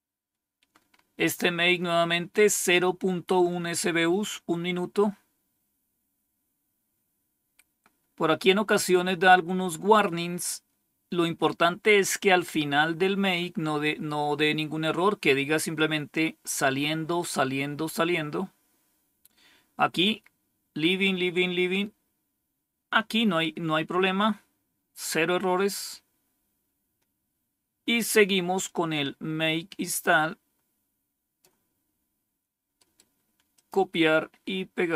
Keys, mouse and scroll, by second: 4.8-5.7 scroll down 1, 26.7-27.3 scroll down 2, 28.5-31.3 drag, 32.6 right click, 33.4 click, 34.8 right click.